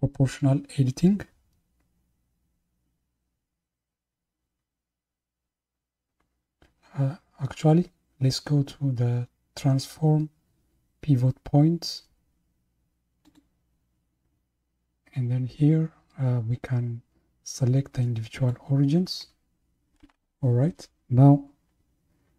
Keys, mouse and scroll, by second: 13.3-16.3 drag.